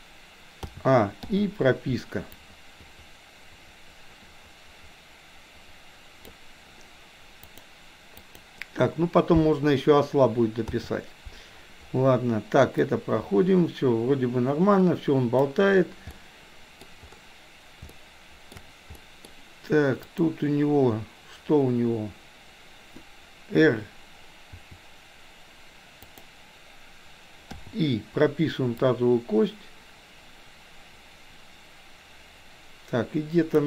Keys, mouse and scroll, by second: 0.6 a, 1.3 i, 2.4-6.4 drag, 7.6 click, 8.2 click, 10.7 a, 12.8-15.4 drag, 16.1-16.8 middle drag, 17.8-18.6 shift+middle drag, 18.9 middle click, 20.2 click, 24.6 r, 27.4 i, 28.8-33.6 drag.